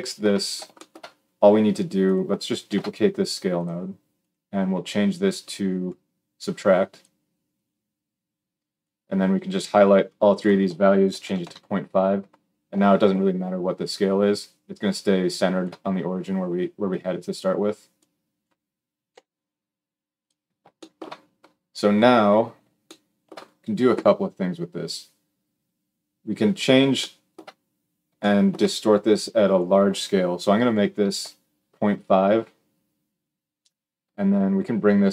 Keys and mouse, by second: 1.9-3.9 shift+middle drag, 2.4 shift+d, 3.9-20.1 drag, 18.9 g, 20.1-29.4 shift+middle drag, 29.4-35.1 drag.